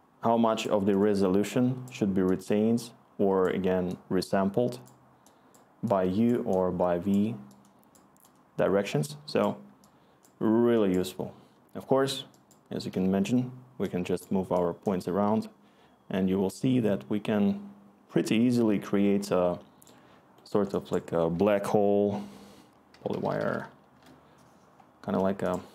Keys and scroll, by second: 21.3 Tab, 22.7-23.9 typing, 23.9 Return.